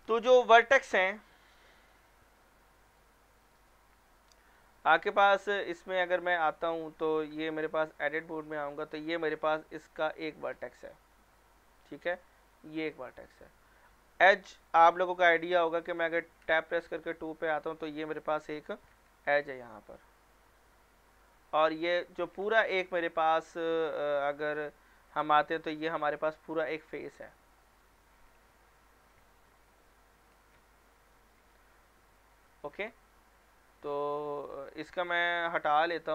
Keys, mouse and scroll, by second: 1.5 click, 5.2 scroll up 1, 5.5 middle click, 6.5 Caps_Lock, 7.2 middle click, 7.5 Tab, 9.1 scroll up 1, 9.6 click, 10.1 scroll down 1, 10.3 middle click, 11.8-12.2 scroll up 1, 12.2 middle click, 14.6 Tab, 16.6 click, 17.1 scroll down 1, 17.3 middle click, 18.9 g, 21.6 middle click, 22.4 Escape, 22.9 middle click, 23.2-24.6 scroll up 1, 24.6 Tab, 25.7 click, 26.1 scroll down 1, 26.3 scroll up 1, 27.7 click, 28.7 i, 29.5 click, 30.2 e, 31.0 click, 31.3 scroll down 1, 31.5 middle click, 32.8 scroll up 1, 33.2 middle click, 34.8 Tab.